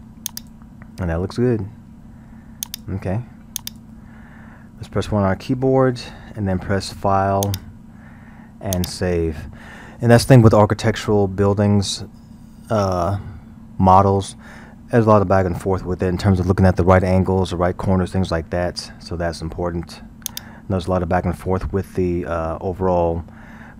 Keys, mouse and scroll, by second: 2.7 click, 3.6-5.0 drag, 5.0 KP_1, 5.6 scroll, 7.5-10.5 drag, 20.3 click, 21.3 scroll.